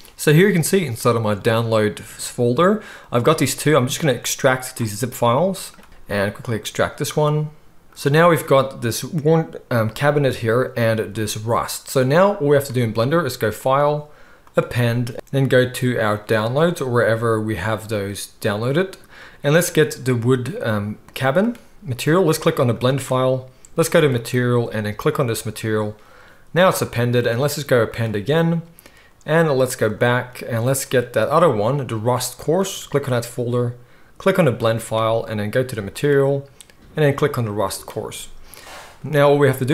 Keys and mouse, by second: 12.5 middle click, 12.6-14.8 right drag, 13.6-25.5 drag, 13.6-14.8 middle drag, 25.3-35.2 right drag, 27.1-37.8 drag, 27.1-35.2 middle drag, 37.4 middle click, 37.4 right click, 37.8-39.7 right drag.